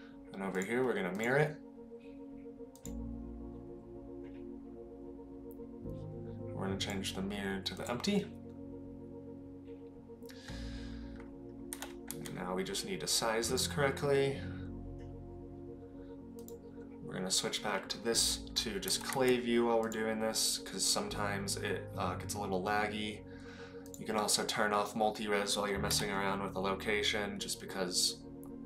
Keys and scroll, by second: 11.7 g, 18.8 g, 26.0 g.